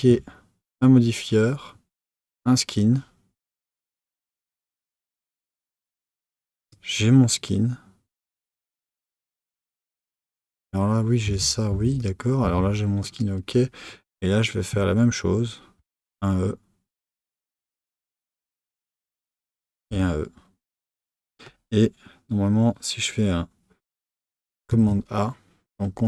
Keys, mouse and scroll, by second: 0.7-2.2 middle drag, 0.7 click, 2.2-3.7 drag, 6.6-9.6 drag, 9.7 click, 11.3 Tab, 11.7 Tab, 11.9 click, 12.4 Tab, 13.0 click, 15.8 e, 19.7 e, 24.7 a.